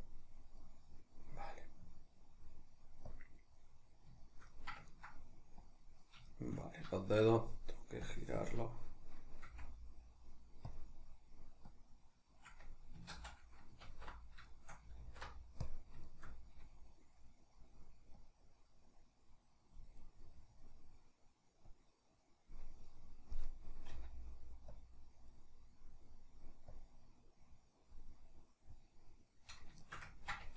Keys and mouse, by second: 0.1 click, 0.6-3.1 middle drag, 3.1 click, 3.6-5.6 middle drag, 5.6 click, 6.2-8.0 shift+middle drag, 8.0-10.8 drag, 9.4 f, 11.8-14.5 drag, 13.2 ctrl+z, 13.9 alt+q, 14.5-18.3 shift+middle drag, 15.1 alt+q, 18.3-20.1 drag, 20.1-21.9 middle drag, 21.9 click, 22.7-24.9 middle drag, 23.9 f, 24.9 click, 25.3-26.8 middle drag, 26.8-28.2 drag, 28.2-30.4 middle drag, 30.4 Tab.